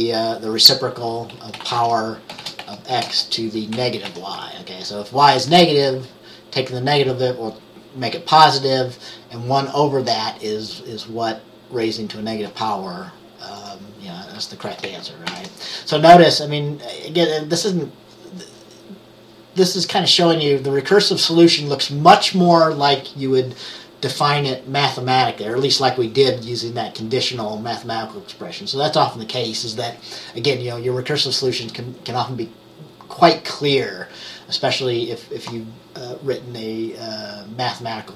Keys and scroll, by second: 1.2-4.1 typing, 15.3 ctrl+s.